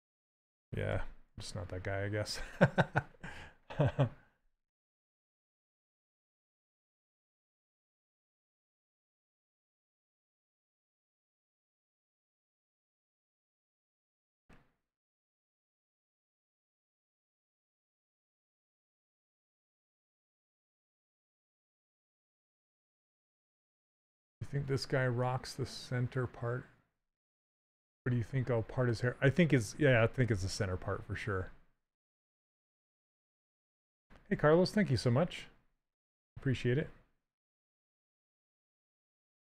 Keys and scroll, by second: 0.6 d, 9.0 w, 18.4 s, 33.9 s.